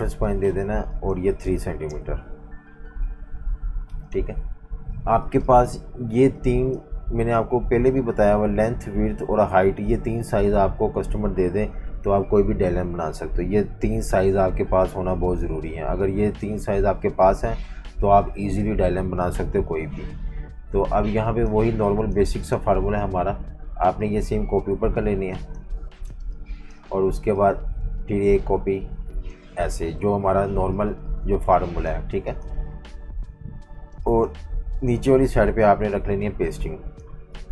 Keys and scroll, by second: 1.6 3, 1.9 Return, 4.6 super+-, 5.2 typing, 11.7 F18, 20.2 F19, 20.6-22.1 typing, 25.8-26.7 typing, 30.1 super+-, 30.9 typing, 32.1 typing, 33.9 space, 37.3-37.5 typing.